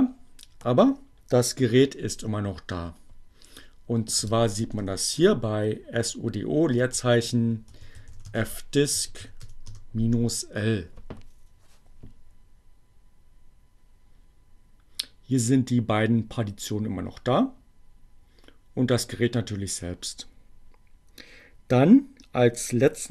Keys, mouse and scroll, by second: 2.4-3.5 typing, 4.8 o, 5.4 space, 7.4-9.9 typing.